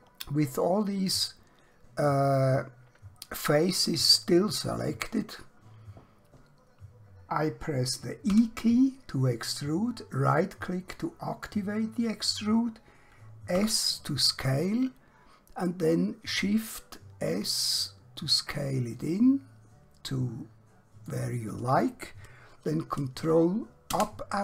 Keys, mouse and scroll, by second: 0.3 middle click, 8.2 e, 10.2 right click, 13.6 s, 21.2 click, 23.9 ctrl+KP_Add.